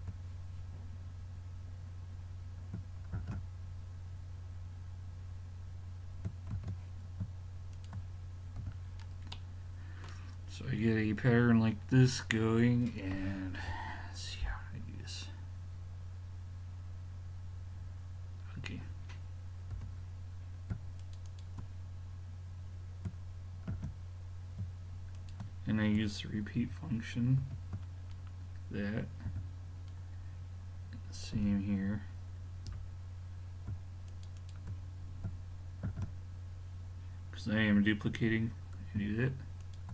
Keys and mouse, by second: 3.2 shift+d, 8.6 a, 8.9-9.4 middle drag, 13.2-17.9 middle drag, 19.8 l, 21.0-23.3 drag, 23.7 shift+d, 26.6 shift+r, 27.4 shift+r, 28.0-29.8 middle drag, 29.3 a, 31.4 l, 32.7 l, 34.1-36.3 drag, 35.9 shift+d.